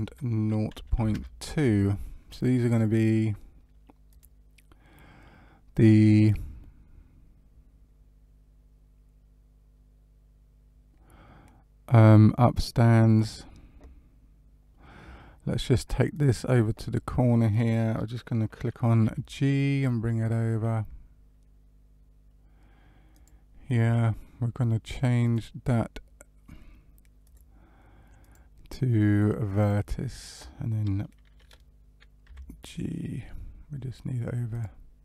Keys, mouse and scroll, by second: 2.7 click, 4.0 click, 16.1 click, 19.2 g, 25.2 click, 28.1 click, 32.2 g.